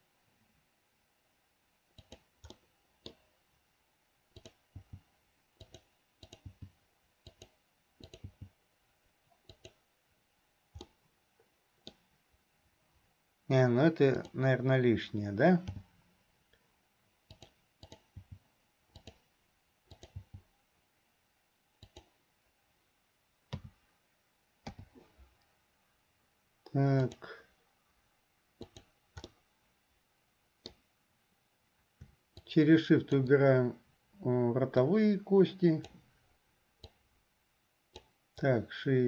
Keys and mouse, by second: 2.8 click, 2.8 right click, 4.4 click, 6.4 click, 6.8 g, 8.3 click, 11.2 click, 11.2 right click, 20.0 click, 23.7 a, 24.9 i, 27.2 click, 28.7 click, 29.4-30.9 middle drag, 32.5-33.5 shift+drag, 35.0-36.2 drag, 36.9-38.0 drag.